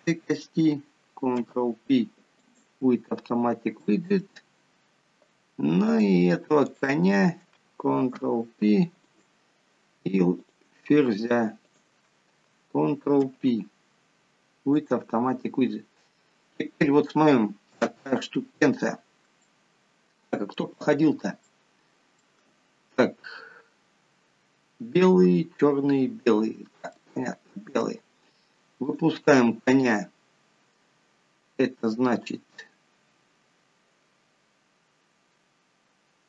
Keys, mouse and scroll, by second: 1.6 ctrl+p, 4.1 shift+middle click, 4.7 scroll up 6, 6.2 click, 6.9 shift+click, 8.3 ctrl+p, 10.7 click, 11.9 shift+click, 13.5 ctrl+p, 15.6 scroll down 4, 16.3-16.9 scroll down 3, 17.4 scroll down 3, 18.0 KP_7, 19.1-19.4 scroll up 3, 19.7 shift+middle click, 21.7 shift+middle click, 27.2 shift+middle click, 29.1 click.